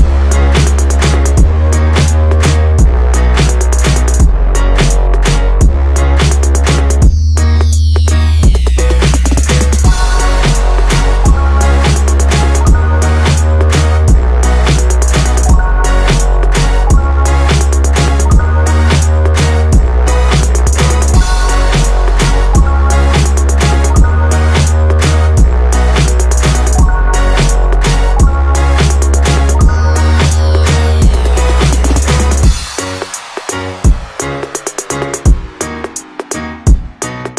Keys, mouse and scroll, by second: 0.4-0.8 scroll down 1, 0.8 click, 2.1 b, 3.8 scroll up 1, 8.8-9.3 scroll down 1, 9.3 Tab, 10.2 click, 11.8 click, 12.4-12.7 scroll up 1, 13.3 click, 13.9 KP_1, 16.7-19.7 drag, 20.4-21.1 drag, 21.1-21.6 scroll down 1, 22.6 shift+a, 24.3-24.9 scroll up 3, 24.9 s, 27.6 click, 28.1 Tab, 28.8 Tab, 30.1 click, 31.2 click, 31.7-32.2 scroll down 1, 34.0 click, 34.7-37.3 scroll down 1.